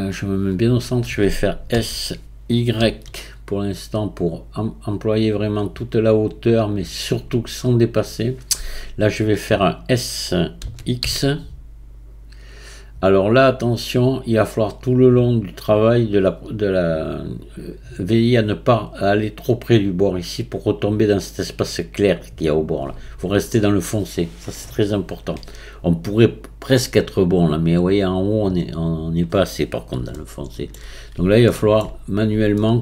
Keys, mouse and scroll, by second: 1.7 s, 10.6 s, 30.1-31.0 shift+middle drag, 31.0-31.5 scroll up 1, 31.5 shift+middle click, 32.1-32.6 scroll down 1, 32.6 shift+middle click.